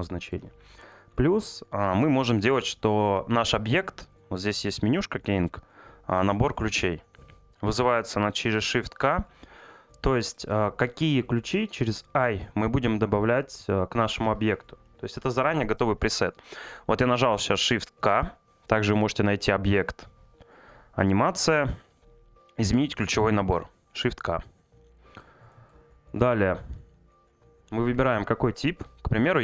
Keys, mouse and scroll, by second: 1.8 middle click, 4.1-8.6 drag.